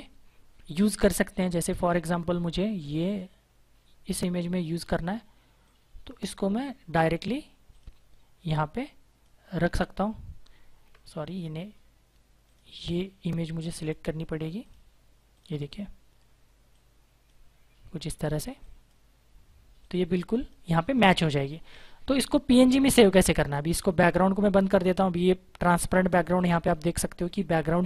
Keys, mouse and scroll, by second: 2.8 click, 4.6 click, 11.2 click, 16.7 click, 26.3 click.